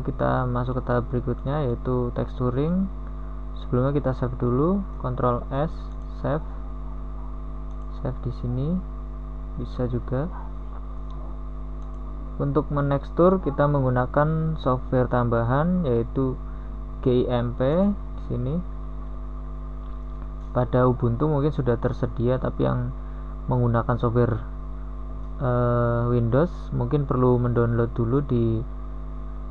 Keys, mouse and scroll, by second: 5.4 ctrl+s.